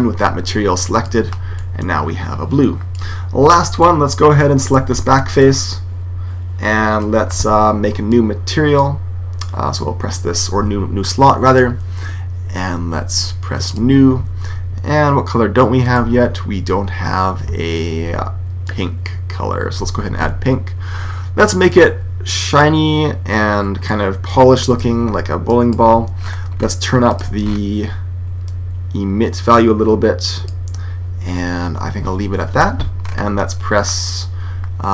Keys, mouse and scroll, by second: 0.8 click, 1.7 middle click, 2.2 click, 4.5 right click, 6.2 middle click, 7.9 click, 11.3 click, 13.5 click, 15.7 click, 21.6-27.1 drag, 27.3-29.3 middle drag, 28.3 click, 32.9-34.9 middle drag.